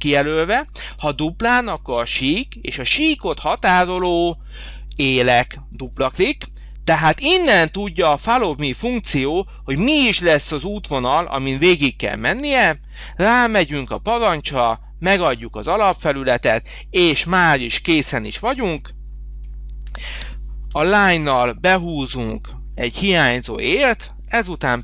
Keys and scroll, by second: 20.5 l, 24.6 e.